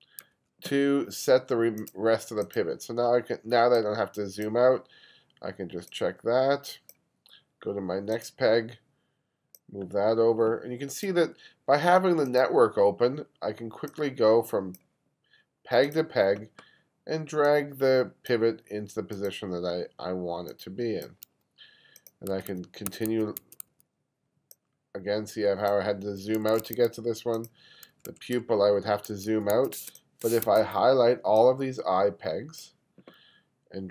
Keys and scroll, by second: 0.4 1, 22.4 1, 26.2 2, 27.3 2, 29.1 1, 29.9 space, 30.5 1.